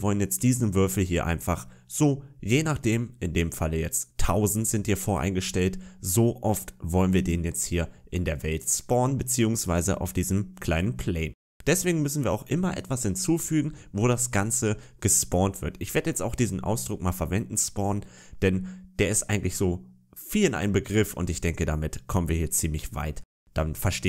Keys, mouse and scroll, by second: 8.9-13.8 scroll down 2, 23.8-24.0 scroll up 4.